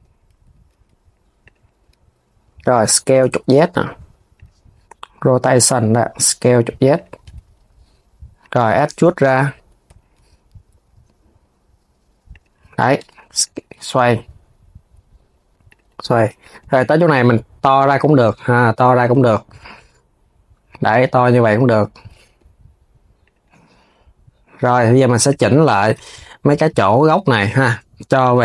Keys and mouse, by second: 0.1 g, 18.9 g, 21.1 click, 22.9-25.0 drag, 25.5 click, 25.8 KP_1, 26.8 click, 27.3 KP_3.